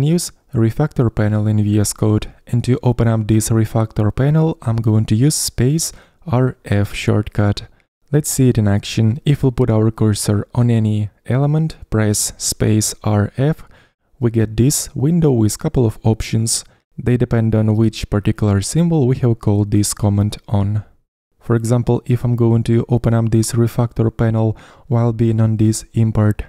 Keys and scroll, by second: 14.4 space, 14.4 r, 14.7 f.